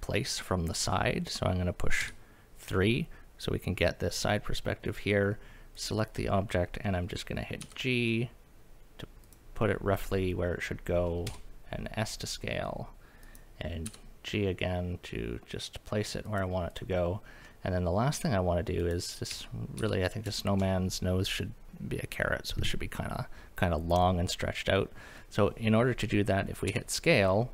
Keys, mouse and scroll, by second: 2.0 KP_3, 5.7 click, 7.0-7.6 scroll up 2, 7.6 g, 9.2 click, 11.3 s, 13.2 click, 13.8 g, 16.2 click, 16.7 click, 17.4-18.4 middle drag, 18.8 click, 19.3 KP_1, 19.8 KP_3, 20.1 scroll up 2, 20.4 shift+middle drag, 24.4-26.7 scroll down 2, 26.7 s.